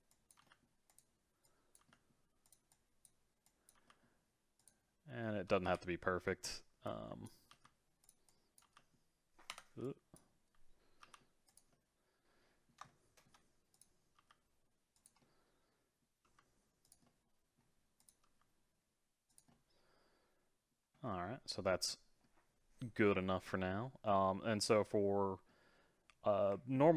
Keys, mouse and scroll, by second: 0.1 click, 0.4 g, 1.4 click, 1.8 g, 2.7 click, 3.4 click, 3.7 g, 5.6 KP_7, 6.3-6.8 scroll up 4, 6.8 click, 7.5 g, 8.3 click, 8.6 g, 9.8 click, 11.0 g, 11.7-13.7 middle drag, 13.7 click, 14.1 c, 15.2-16.3 middle drag, 16.3 g, 17.1 middle click, 18.0 click, 18.3 g, 19.5-20.9 middle drag, 20.9 scroll down 3, 21.2-26.1 middle drag.